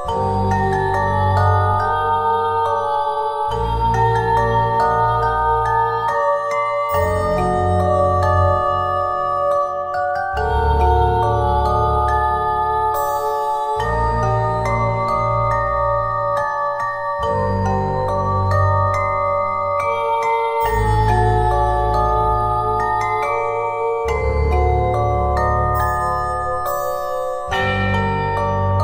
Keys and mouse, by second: 0.2 Tab, 6.7 KP_1, 8.2 right click, 8.8 z, 8.8 z, 9.1 z, 11.8 click, 13.6 ctrl+z, 16.2 KP_1, 17.2 c, 21.2 KP_1, 22.1-23.4 middle drag, 23.4-24.8 drag, 24.9 z, 26.6-27.6 drag, 27.6 Tab.